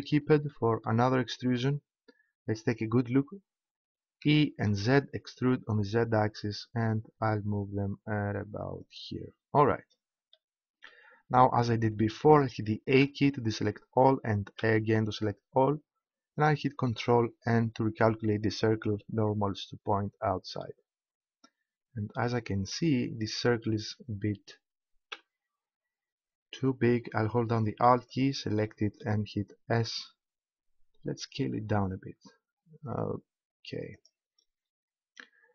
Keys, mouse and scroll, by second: 4.2 e, 8.9-11.8 drag, 13.0 a, 15.8 a, 17.6 ctrl+n, 22.4-25.1 middle drag, 25.1 a, 27.9-29.8 middle drag, 29.8 s, 34.1-35.5 drag.